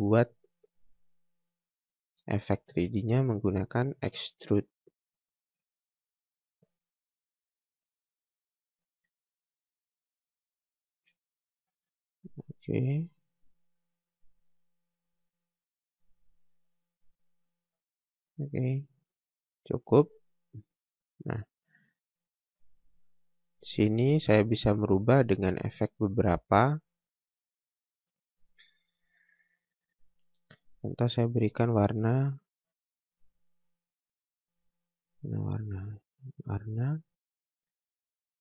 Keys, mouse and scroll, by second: 1.6 click, 4.1 click, 4.7-5.5 scroll up 1, 5.5 click, 7.9-9.2 scroll down 1, 9.2 space, 9.6-10.3 scroll up 1, 10.3 click, 10.9 space, 13.4 scroll down 1, 13.8 scroll up 1, 15.9 click, 18.2 scroll down 1, 18.4 scroll up 1, 19.0 space, 19.4 scroll down 1, 20.1 click, 20.7 scroll up 1, 21.6 scroll down 1, 22.0 scroll up 1, 22.8 click, 24.8 scroll down 1, 25.0 scroll up 1, 28.5-29.1 scroll up 1, 30.9 click, 35.1 click.